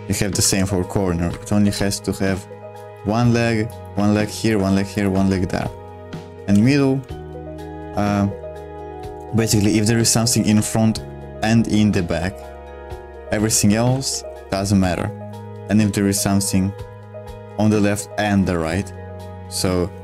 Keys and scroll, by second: 0.0-0.9 typing, 1.2 Escape, 1.6 super+2, 3.2 ctrl+z, 3.9 ctrl+z, 4.6 ctrl+z, 5.1 ctrl+z, 5.6 super+1, 6.0-7.8 typing, 7.1 Escape, 8.9 typing, 10.1-13.2 typing, 13.6 Escape.